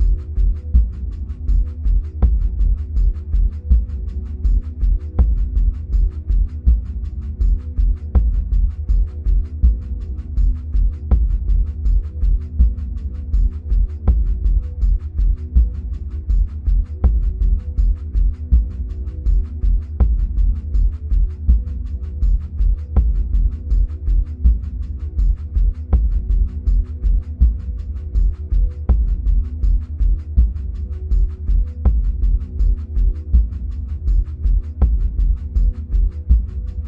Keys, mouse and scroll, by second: 16.6 middle click, 17.6-18.6 scroll down 2, 18.6-19.3 scroll up 2, 19.3-21.6 scroll up 1, 21.6-22.3 scroll up 1, 22.3-24.4 scroll down 2, 24.4 click, 31.1-36.8 drag.